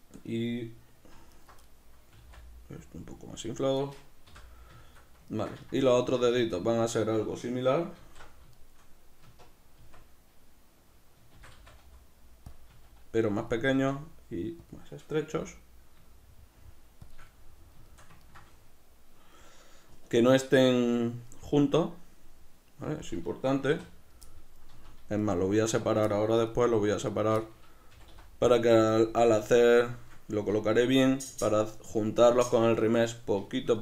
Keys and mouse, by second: 1.3 alt+right click, 1.6-3.3 middle drag, 2.1 s, 3.3 click, 3.7 right click, 4.3 l, 4.8-7.9 shift+middle drag, 7.9 alt+q, 8.5 shift+middle click, 9.2 Tab, 12.5 click, 12.7 s, 13.5 click, 13.6 s, 14.7 click, 15.3 g, 17.1 shift+click, 17.3-25.2 middle drag, 23.7 3, 24.7 z, 25.2 right click, 26.1-27.1 middle drag, 27.1 shift+right click, 27.4-28.6 middle drag, 27.9 g, 28.6 click, 28.7-33.8 middle drag, 29.0 z.